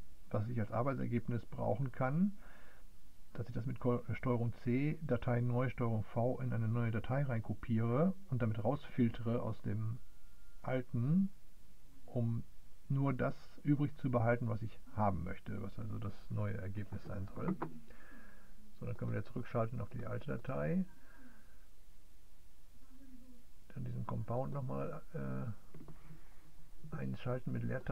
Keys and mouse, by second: 19.8 click, 23.8-27.9 drag.